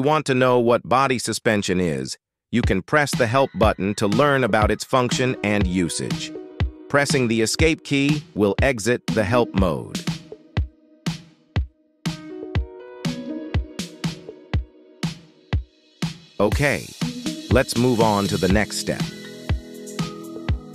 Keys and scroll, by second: 11.7 Escape.